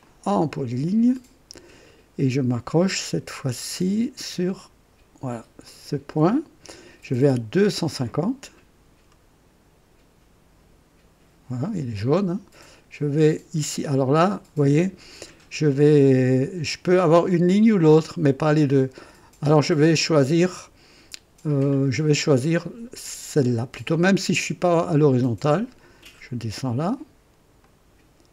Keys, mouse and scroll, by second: 0.0 click, 5.6 click, 11.6 click, 24.4 click, 27.6 click.